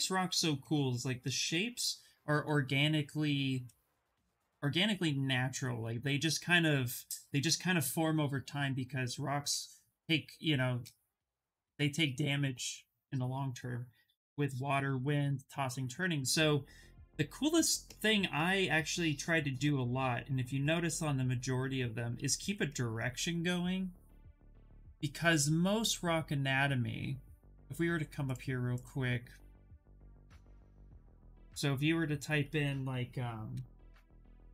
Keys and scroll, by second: 34.0 r.